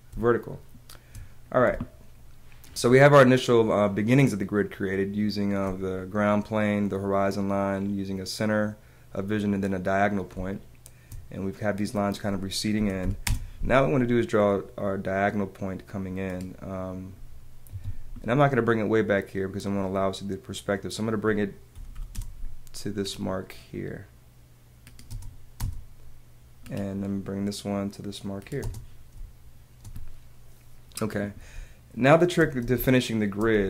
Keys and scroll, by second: 0.3 space, 0.4 space, 1.7 space, 10.3 space, 12.7 p, 14.0 space, 17.7 Escape, 21.7 p, 23.0 space, 25.1 space, 28.6 space, 31.5 space, 32.7 space.